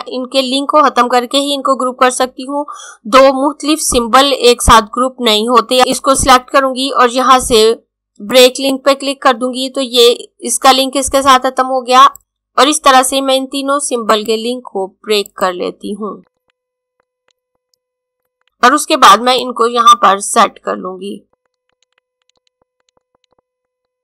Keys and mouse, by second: 5.9 click, 12.0 click, 17.0 click, 17.6 click, 18.2 click, 23.8 click.